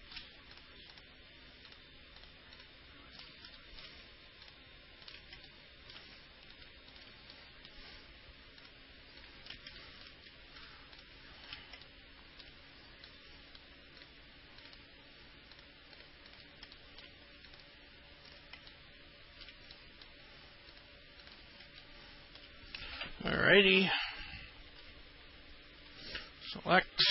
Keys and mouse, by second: 0.7 ctrl+click, 1.1 ctrl+click, 2.4 ctrl+click, 2.7 ctrl+click, 3.8 alt+middle click, 4.6 ctrl+click, 5.7 alt+middle click, 6.7 ctrl+click, 7.6 middle click, 8.8 ctrl+click, 9.4 ctrl+click, 10.0 alt+middle click, 10.8 ctrl+click, 12.0 alt+middle click, 13.3 middle click, 14.8 ctrl+click, 16.5 ctrl+click, 17.0 alt+middle click, 17.7 ctrl+click, 18.5 ctrl+click, 18.9 alt+middle click, 20.0 middle click, 20.9 ctrl+click, 21.4 ctrl+click, 22.0 alt+middle click, 24.5 alt+middle click, 26.1 ctrl+click.